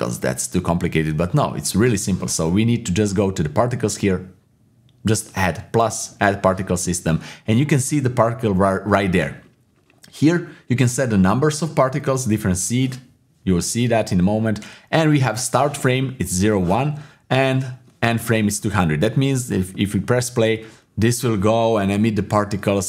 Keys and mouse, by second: 0.8 shift+middle click, 6.8-8.4 drag, 19.5 click.